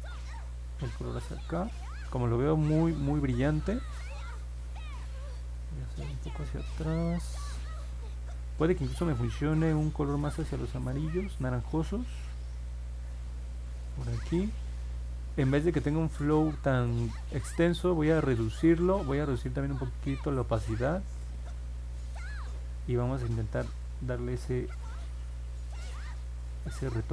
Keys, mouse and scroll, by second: 0.5 click, 1.4 click, 5.5 ctrl+z, 16.2-18.4 drag, 19.9 click, 23.5 click, 23.9 click, 24.6 click, 24.9 click, 25.2 click, 25.5 click, 25.9 click, 26.3 click, 26.6 click, 26.9 click.